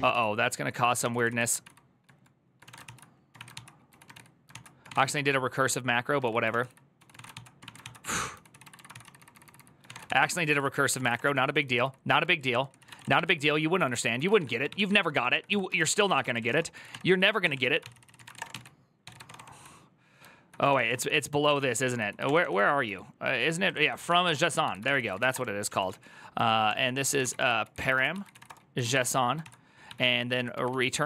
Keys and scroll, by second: 0.0-19.5 typing, 0.8 ctrl+c, 10.4 ctrl+c, 12.2 ctrl+c, 17.3 ctrl+n, 17.4 ctrl+y, 17.6 ctrl+c, 20.6 ctrl+d, 21.3-31.0 typing, 24.6 ctrl+c, 24.7 ctrl+c, 29.2 ctrl+c.